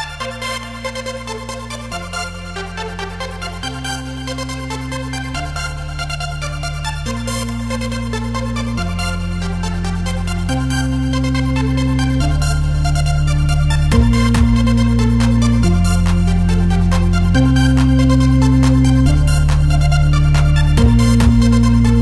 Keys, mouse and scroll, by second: 0.9-1.7 scroll up 1, 1.3 click, 2.0 middle click, 3.1 click, 4.8-10.3 drag, 10.7 click, 11.1 click, 15.6-16.9 drag, 18.4-19.7 drag, 19.5-21.2 middle drag, 21.7 middle click.